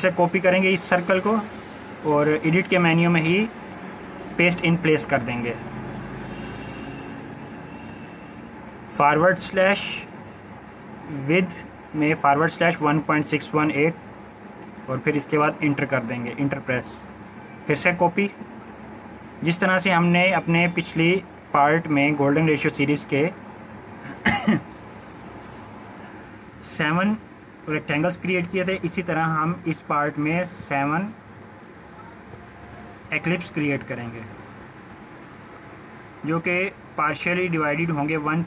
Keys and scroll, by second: 9.2-11.3 typing, 11.9 Return, 24.8-26.6 typing, 27.6 Return, 29.6 ctrl+=, 29.8 ctrl+=.